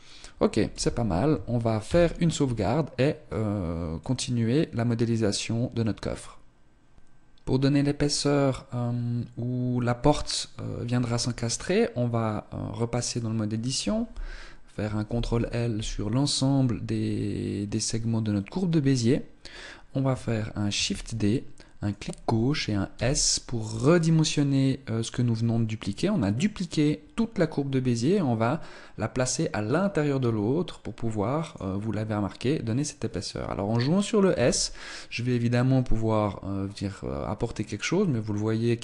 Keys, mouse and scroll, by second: 0.6 z, 1.7 ctrl+s, 10.9 Tab, 12.9 right click, 14.9 ctrl+l, 20.6 shift+d, 22.8 s, 34.2 s.